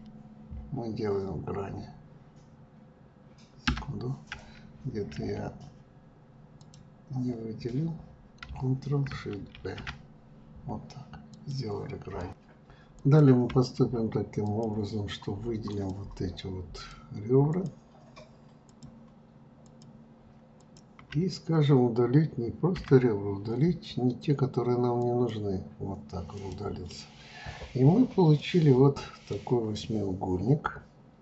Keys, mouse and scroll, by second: 6.6 shift+click, 9.6 ctrl+shift+b, 12.2 click, 12.9 click, 14.4 shift+click, 15.7 shift+click, 16.7 shift+click, 17.5 shift+click, 18.6 shift+click, 19.6 shift+click, 20.5 shift+click, 22.7 Delete, 26.3 click, 28.3-31.2 middle drag.